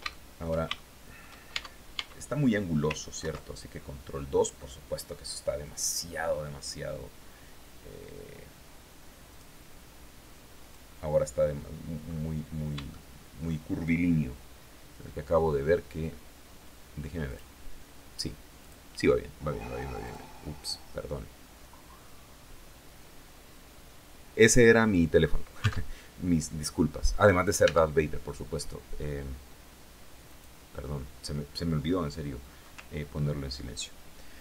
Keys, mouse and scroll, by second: 0.2 shift+middle click, 0.9 shift+Tab, 2.6 ctrl+2, 8.7 click, 10.0 click, 11.5-12.0 scroll up 2, 12.4 shift+click, 16.7 click, 18.0 click, 19.5 click, 27.1 Tab, 29.7 click.